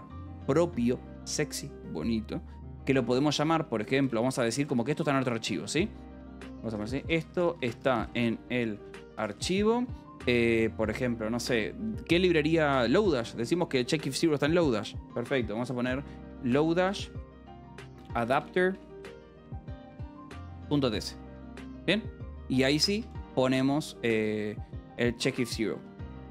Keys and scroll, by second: 3.3-9.8 typing, 16.1-22.5 typing, 24.1 Escape, 24.6 j, 25.7 k, 26.0 u.